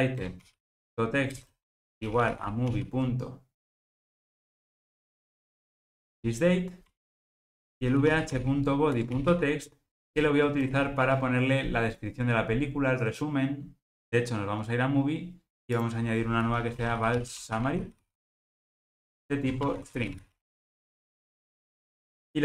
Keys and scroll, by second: 0.3 Return, 0.8 Return, 6.1 Return.